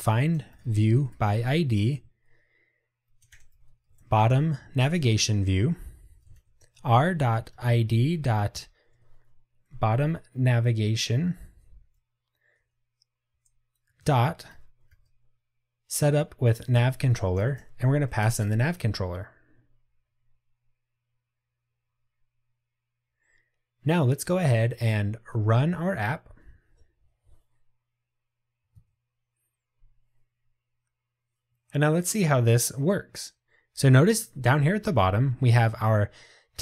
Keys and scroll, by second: 4.8 Return, 9.0 Return, 16.9 Return, 25.0 ctrl+r.